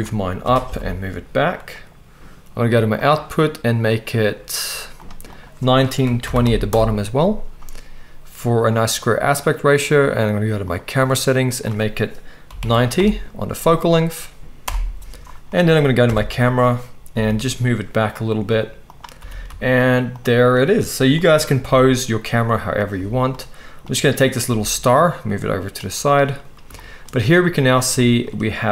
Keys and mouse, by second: 0.4 g, 3.0 middle click, 3.1 click, 3.5 right click, 3.8-5.0 middle drag, 5.0 right click, 5.4-10.9 middle drag, 6.7-10.9 drag, 6.7-11.4 right drag, 11.4-18.9 middle drag, 16.0 click, 16.0 right click, 16.0 KP_0, 17.1 g, 18.9-20.3 right drag, 19.1 g, 20.3 click, 20.4 right click, 21.0 shift+click, 21.1-25.7 shift+right drag, 21.6 g, 22.9 g, 23.8 click, 23.8 middle click, 24.5 g, 25.7-28.7 drag.